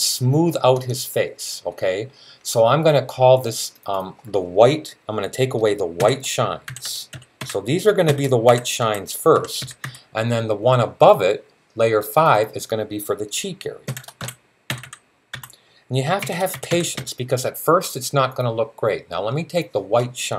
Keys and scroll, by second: 5.8-10.2 typing, 13.4-17.3 typing.